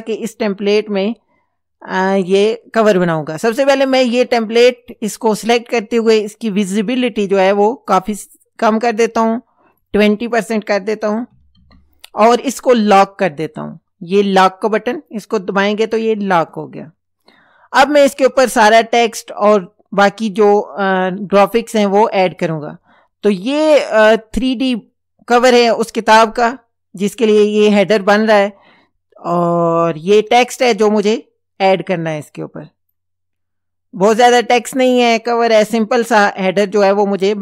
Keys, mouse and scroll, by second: 4.8 click, 7.0-9.2 drag, 9.8 click, 11.1 KP_2, 11.3 KP_0, 11.6 KP_Enter, 15.0 click, 21.9 click, 22.5 click, 23.3 click, 29.3 click, 30.3 click, 32.5 click, 34.7 click.